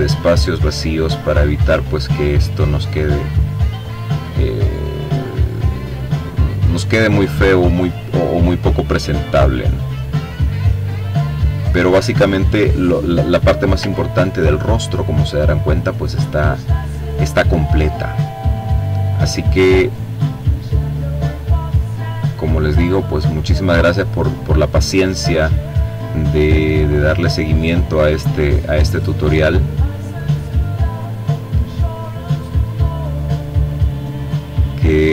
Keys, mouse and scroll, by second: 2.3 click, 3.5-4.8 drag, 5.2-6.6 drag, 7.3 click, 10.1-11.6 drag, 11.6-12.8 ctrl+scroll down 1, 12.9-14.4 ctrl+drag, 14.4-15.1 ctrl+scroll up 2, 15.4 click, 16.5-18.1 drag, 18.5-20.4 drag, 20.9 click, 22.5-23.9 drag, 24.3-26.4 drag, 27.0-28.3 drag, 30.0-31.2 drag, 31.6-33.0 drag, 33.2-34.4 drag, 35.0-35.1 drag.